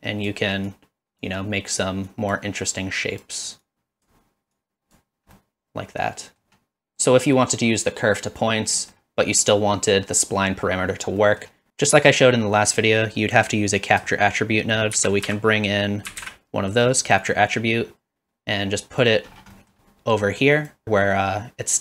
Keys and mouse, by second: 0.7 click, 2.2 click, 2.7 click, 3.8 click, 4.6 click, 5.3-6.4 middle drag, 6.7-8.4 drag, 8.9 middle click, 11.2 middle click, 15.0 shift+a, 19.7 middle click, 20.5 click.